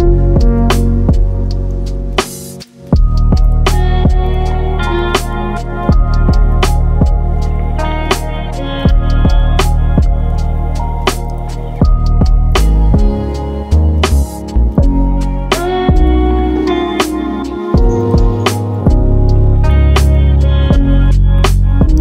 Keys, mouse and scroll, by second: 0.4 Tab, 0.8 click, 1.3 click, 1.8 Tab, 2.4 click, 3.3 2, 3.5 click, 4.3 click, 6.2 click, 7.6 click, 9.8 ctrl+r, 10.0 a, 10.1-11.4 middle drag, 11.4 e, 12.3 click, 12.6 a, 13.4 click, 14.3 middle click, 15.2 ctrl+r, 18.2 click, 18.4 click, 19.7 click, 20.1-22.0 middle drag.